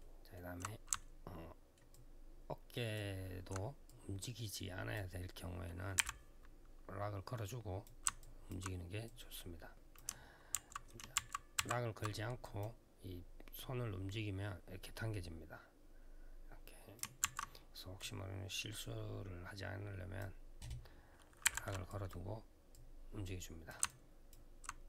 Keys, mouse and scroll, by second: 0.8 alt+middle click, 1.7 alt+click, 3.6 click, 5.7 r, 7.2 click, 8.0 alt+click, 8.8 click, 10.3 ctrl+z, 10.9 ctrl+z, 12.2 click, 13.3 click, 17.0 ctrl+z, 17.7 click, 21.4 r, 21.6 click, 22.5 click, 23.6 alt+click.